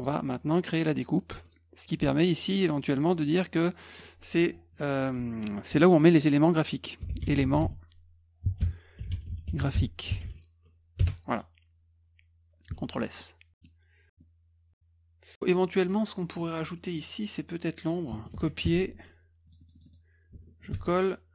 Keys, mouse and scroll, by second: 0.0 right click, 1.5 click, 2.5 click, 3.1 click, 3.5 click, 3.6 click, 6.8-10.7 typing, 11.0 Return, 12.8 ctrl+s, 13.2-13.6 middle drag, 14.2-15.4 middle drag, 15.5 middle click, 15.6 middle click, 15.7 scroll up 4, 15.8 middle click, 16.4 F2, 16.8 click, 18.3 ctrl+c, 18.6 F1, 19.5 click, 19.6 click, 19.8 click, 19.9 click, 20.7 ctrl+alt+v.